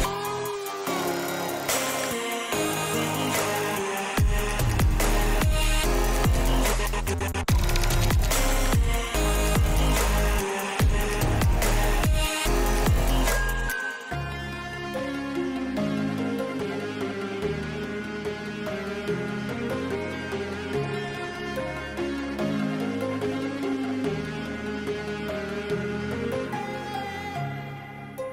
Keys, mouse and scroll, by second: 0.5 click, 0.8 g, 1.9 click, 2.1 click, 2.4 click, 2.8 g, 7.3 click, 8.6 click, 9.6 g, 12.2 click, 12.6 g, 15.0 click, 15.1 g, 16.2 click, 16.4 g, 17.2 click, 17.4 g, 18.4 click, 21.5 s, 24.6 s, 25.9 g, 27.8 s.